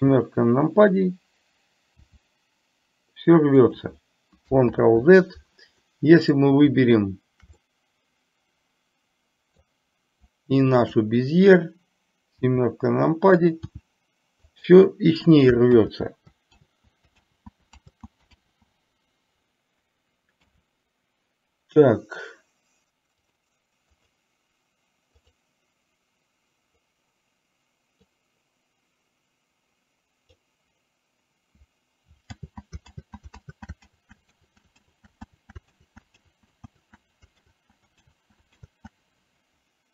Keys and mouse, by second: 2.0 r, 4.8 ctrl+z, 5.9-6.4 middle drag, 7.7-9.7 middle drag, 13.8 r, 15.8 ctrl+z, 16.7 ctrl+z, 23.3 click, 24.0 click, 25.3 click, 28.0-30.5 drag, 32.4 ctrl+z.